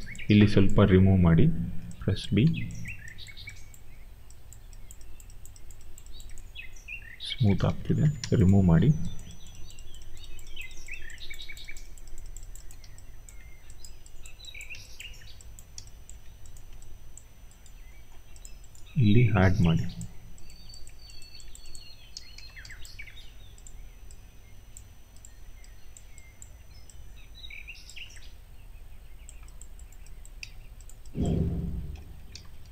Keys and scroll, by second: 7.3 ctrl+z, 19.4 b, 22.1 ctrl+z, 30.3 q, 31.3 e, 32.2 ctrl+z.